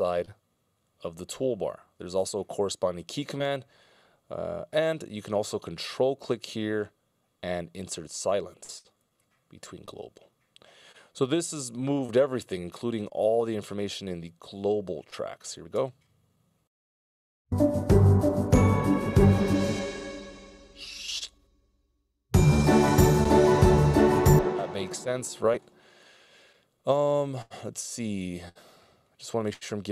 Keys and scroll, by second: 0.1 ctrl+alt+super+m, 3.0 ctrl+alt+super+m, 11.7 c, 16.2 space, 22.8 space.